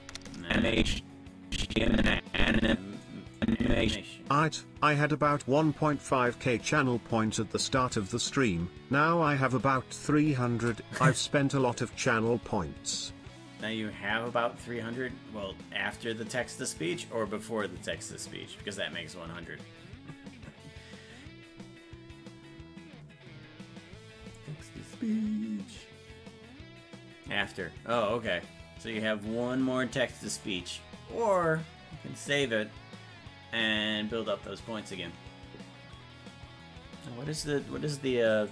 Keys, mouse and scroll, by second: 0.4-3.0 drag, 3.4-4.9 drag, 8.1-10.5 shift+drag.